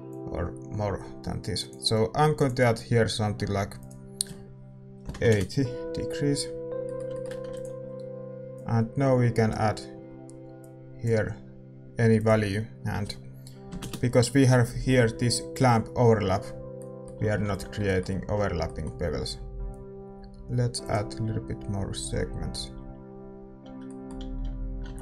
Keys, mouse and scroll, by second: 1.1 click, 3.4-6.1 drag, 6.4-9.5 middle drag, 9.5 ctrl+s, 9.5-12.4 drag, 16.7-22.0 middle drag, 17.8 ctrl+s, 22.0 click, 22.7-25.0 middle drag, 23.6 a, 24.1 a, 24.4 a.